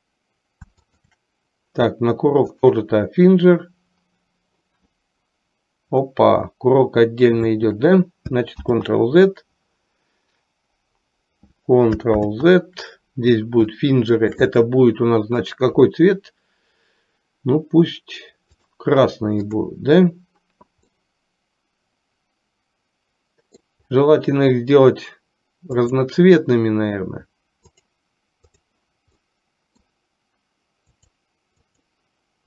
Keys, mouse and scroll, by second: 1.0 shift+click, 2.7 click, 8.8 ctrl+z, 12.3 ctrl+z, 14.1 shift+middle click, 15.6 click, 19.5 click, 21.1-23.7 middle drag, 25.8 click, 28.8 click, 29.3-30.1 middle drag, 31.1 click.